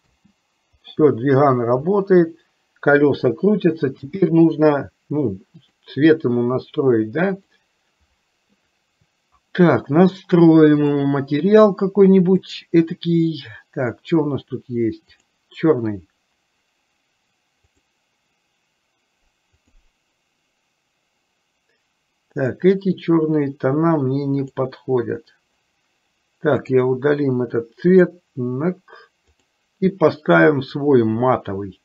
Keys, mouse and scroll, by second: 0.9 space, 4.8 space, 8.0 click, 18.2-20.8 drag, 23.0-25.4 drag, 26.8 click, 28.0 click, 29.5 click.